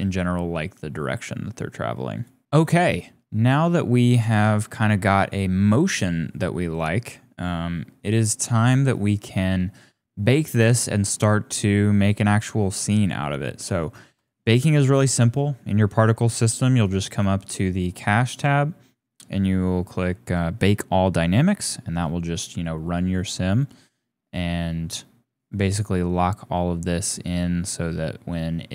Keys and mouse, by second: 0.5 shift+click, 0.9 shift+middle click, 2.1 click, 2.6 click, 14.1 click, 17.1 click, 17.8 click, 20.3 click, 23.1 click, 23.7-25.8 drag.